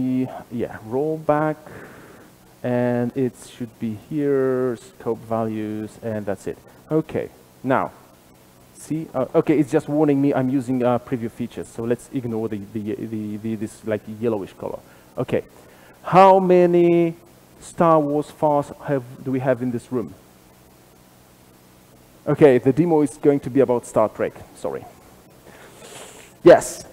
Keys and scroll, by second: 2.2 alt+super+z, 7.0 shift+Escape, 8.8 shift+F12.